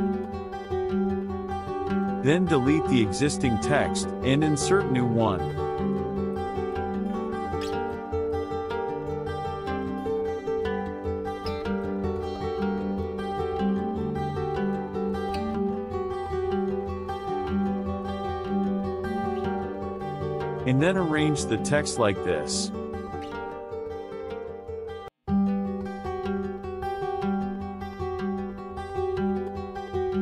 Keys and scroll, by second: 4.2 BackSpace, 5.6 BackSpace, 6.8 BackSpace, 7.9 BackSpace, 17.0 ctrl+v.